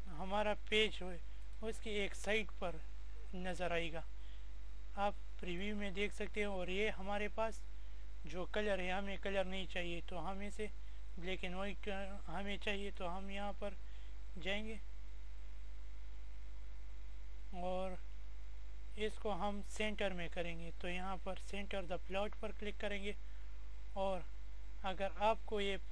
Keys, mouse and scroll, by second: 1.9-5.7 drag, 9.0 click, 20.3 click, 24.0 click.